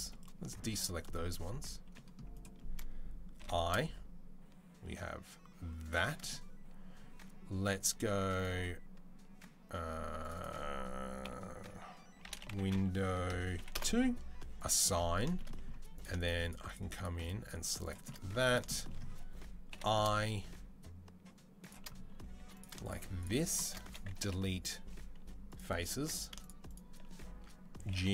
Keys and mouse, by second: 1.6 c, 3.1 i, 8.1-10.1 drag, 10.1-11.2 middle drag, 11.2-15.8 shift+drag, 15.8 shift+middle click, 16.5 shift+click, 16.5-23.0 shift+middle drag, 19.5 i, 22.1 3, 23.0 shift+click, 23.1-26.4 shift+middle drag, 24.0 Delete, 25.7 2, 26.4 shift+click, 26.5-28.1 shift+middle drag, 27.7 g.